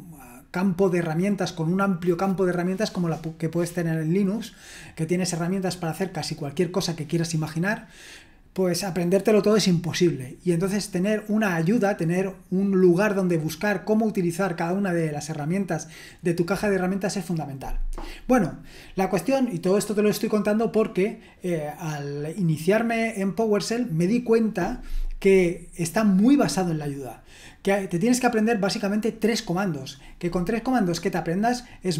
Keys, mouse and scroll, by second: 31.1-31.9 scroll down 1.